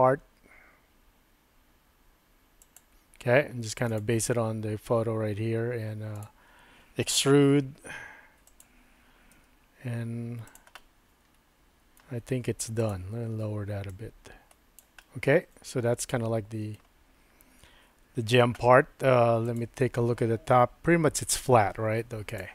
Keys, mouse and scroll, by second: 7.6 e, 9.3 s, 10.8-12.0 middle drag, 12.0 scroll down 1, 12.8 click, 13.9 click, 15.0-17.3 middle drag.